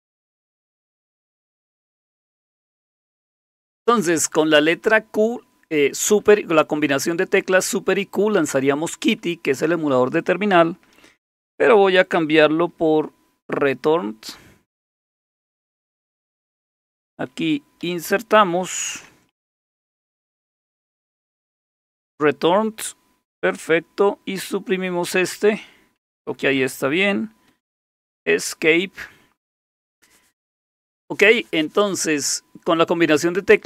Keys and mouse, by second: 17.8 i, 19.3-21.6 typing, 24.4 Delete, 27.5 Escape, 27.9 Escape, 29.4 Escape, 29.4 typing.